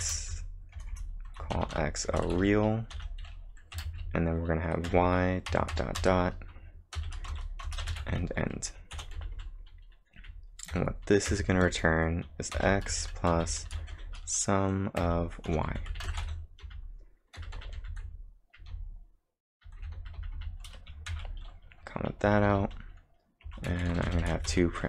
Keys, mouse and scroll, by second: 0.0 ,, 0.2 space, 1.3-14.4 typing, 7.3 Return, 15.6-20.8 typing, 21.1 ctrl+/, 22.0-24.8 typing.